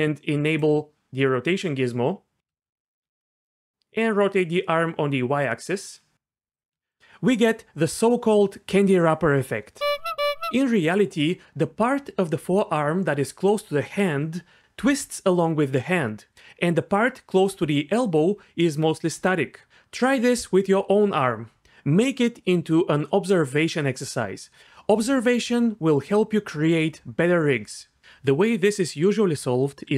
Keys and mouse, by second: 0.4 click, 2.8 middle drag, 4.0 click.